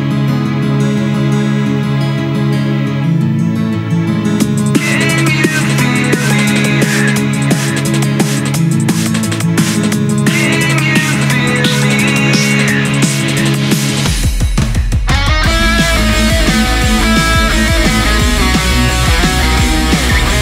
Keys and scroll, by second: 17.2 scroll down 1, 17.4 ctrl+z, 18.1 scroll up 1, 18.4 scroll down 1.